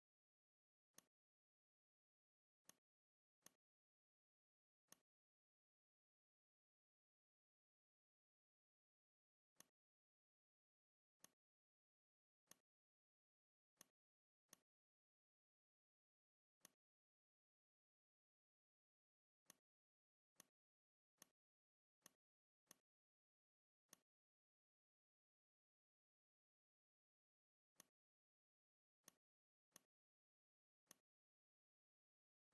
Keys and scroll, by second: 8.6 ctrl+z, 21.7 z, 22.4 space, 23.5 v, 26.8 ctrl+g, 28.7 z, 29.5 space, 30.4 v, 32.2 space.